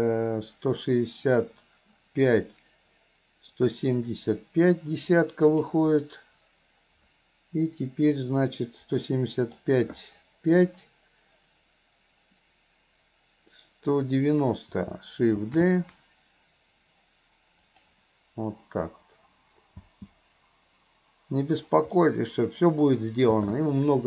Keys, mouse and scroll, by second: 8.5-9.7 middle drag, 19.9 space, 22.1-23.0 middle drag, 23.4 space.